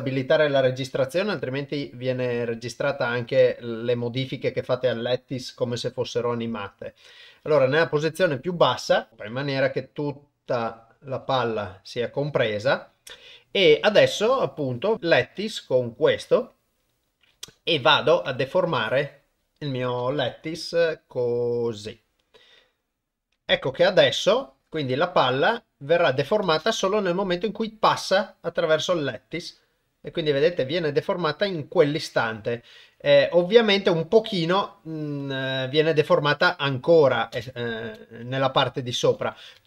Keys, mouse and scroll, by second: 0.9 g, 2.7 s, 9.1 s, 9.3 g, 10.6 g, 18.2 Tab, 18.9 click, 20.5 g, 24.1-26.2 drag, 26.4 shift+space, 37.3 shift+space, 38.2 Left, 38.5 Left, 39.1 Left, 39.2 Left, 39.5 Left.